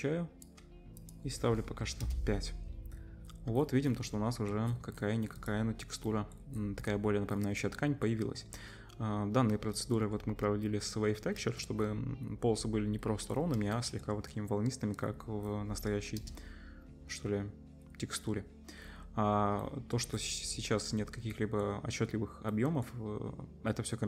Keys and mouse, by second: 5.4-9.5 middle drag, 13.8-14.1 shift+middle drag, 14.2 middle click, 16.1 KP_0.